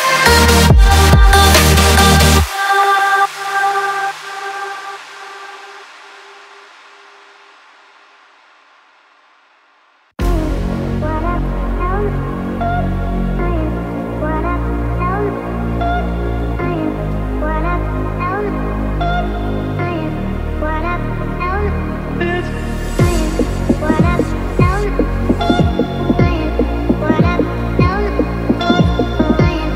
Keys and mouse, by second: 10.3 KP_1, 11.4 shift+middle click, 12.2 click, 13.5 KP_7, 14.5 shift+click, 15.4 1, 16.0 alt+z, 16.4-17.1 drag, 17.7 x, 23.7 click, 26.2 shift+c, 27.8 ., 29.6 s.